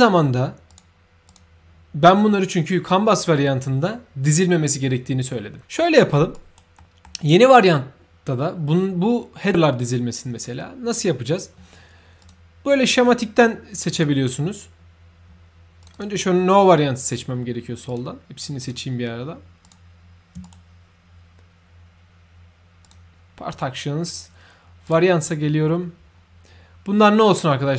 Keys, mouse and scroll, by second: 0.6 click, 1.2 click, 5.7 middle click, 6.3 right click, 6.7 middle click, 12.2 click, 13.9 click, 15.8 click, 17.9 click, 19.6 shift+click, 20.4 shift+right click, 22.8 shift+click, 24.8 shift+click.